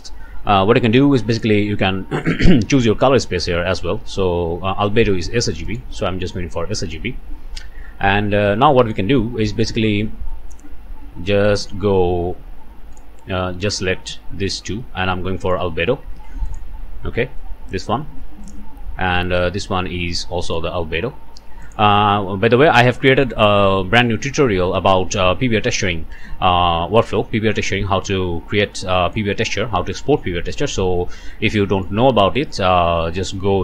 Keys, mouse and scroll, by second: 1.3 middle click, 5.6 middle click, 8.7 middle click, 9.1 scroll down 1, 9.5 middle click, 9.8 scroll up 1, 10.3 middle click, 11.3-11.7 scroll up 1, 11.7 scroll down 1, 12.9 middle click, 14.5 shift+middle click, 15.0 scroll up 2, 15.4 middle click, 15.7 scroll down 2, 16.4 ctrl+shift+click, 17.2 ctrl+shift+middle click, 18.4 middle click, 19.2-20.7 middle drag, 21.6 ctrl+shift+middle click, 22.9 click, 26.2 scroll down 1, 26.6-29.3 drag, 30.8-31.3 scroll up 1, 31.6 click.